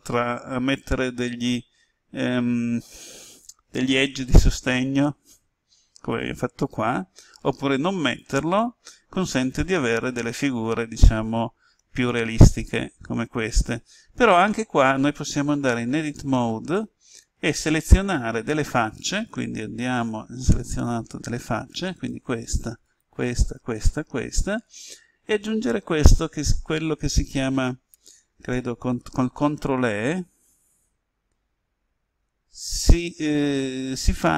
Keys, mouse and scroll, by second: 15.5 Tab, 20.7 click, 21.9 right click, 22.8 shift+right click, 23.4 shift+right click, 24.3 shift+right click, 29.9-30.4 ctrl+e, 32.6 ctrl+e.